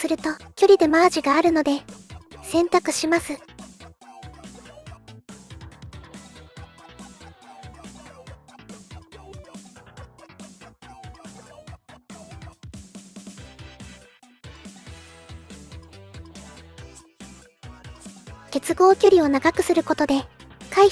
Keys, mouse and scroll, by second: 1.4 click, 2.5 middle click, 4.8 click, 9.2-14.0 drag, 14.8-18.1 drag.